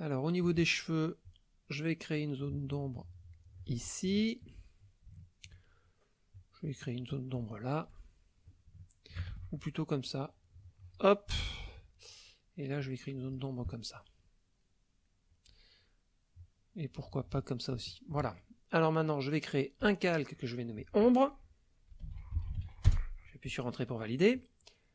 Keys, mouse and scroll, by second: 1.2-3.9 drag, 4.1 shift+middle click, 5.2 shift+middle click, 6.3 click, 7.5 shift+middle click, 7.8 shift+click, 8.8 shift+click, 9.3 ctrl+shift+z, 10.1-11.1 drag, 11.4 shift+click, 12.8 click, 13.8 shift+middle click, 14.6 shift+middle click, 16.4-17.5 drag, 17.8 shift+middle click, 19.8 click, 20.6 click, 21.9-22.6 typing, 22.9 Return.